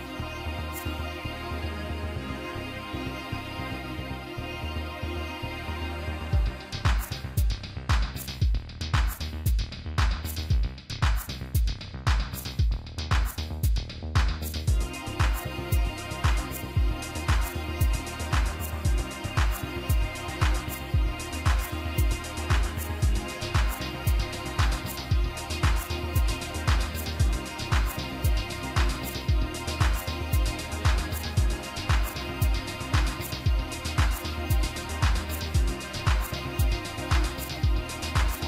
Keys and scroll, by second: 15.7-16.2 typing.